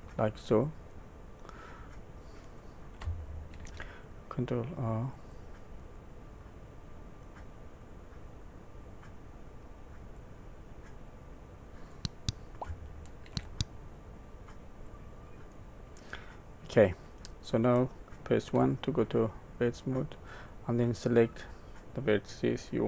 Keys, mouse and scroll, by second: 1.5 middle click, 3.5 ctrl+r, 6.4 middle click, 10.1 click, 11.0 middle click, 13.2 ctrl+r, 16.2 middle click, 18.5 1, 19.2 middle click, 21.0 click.